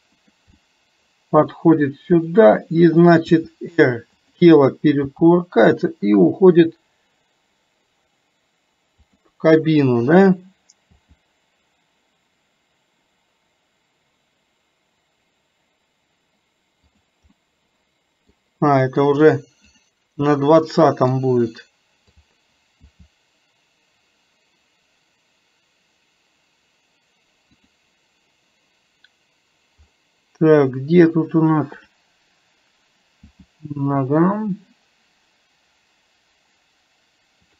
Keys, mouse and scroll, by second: 0.7 middle click, 2.4 click, 10.3 click, 17.4-18.4 middle drag, 19.9 drag, 20.8-21.2 middle drag.